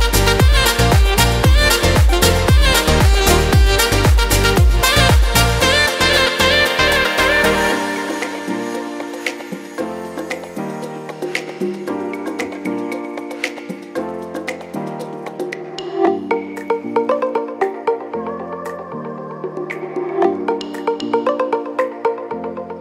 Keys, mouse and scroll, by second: 8.1 e.